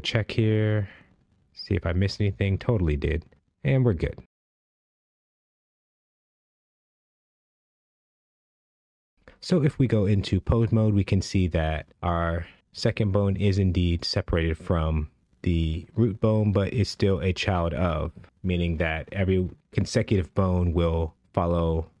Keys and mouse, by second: 1.7 click, 4.2 click, 5.6 click, 8.7 click, 9.6 Tab, 10.2 ctrl+Tab, 11.0-11.9 drag, 11.9 r, 12.8-13.2 drag, 14.0 g, 15.4 right click, 17.0 click, 17.9 r, 18.8-19.8 right drag, 19.8 click, 20.7 g, 21.1-22.0 right drag.